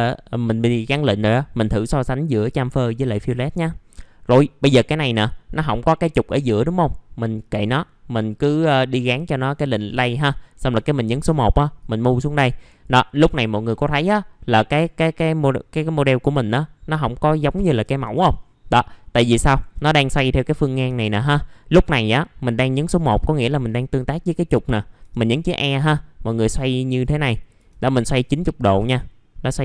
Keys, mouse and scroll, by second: 3.2 middle click, 9.6 click, 10.7 1, 11.8 click, 13.1 scroll down 1, 13.7 scroll up 1, 14.1 alt+middle click, 18.3-18.9 scroll down 1, 18.9 middle click, 20.8 typing, 21.3-22.0 scroll down 1, 23.2-24.3 drag, 24.6 middle click, 25.5-26.2 scroll up 1, 26.2-27.5 drag, 27.5 a.